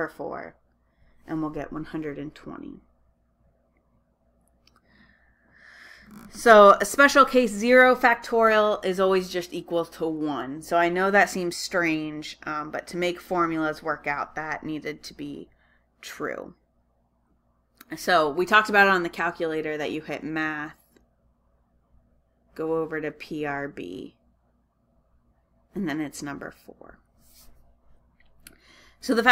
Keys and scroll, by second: 1.2 Return.